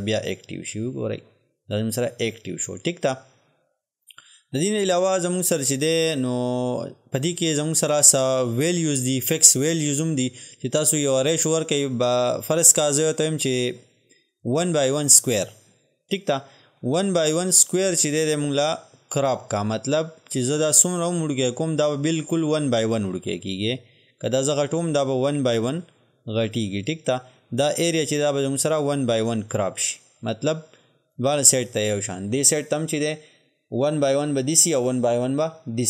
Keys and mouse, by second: 7.9 click, 14.7 click, 20.7-30.7 drag.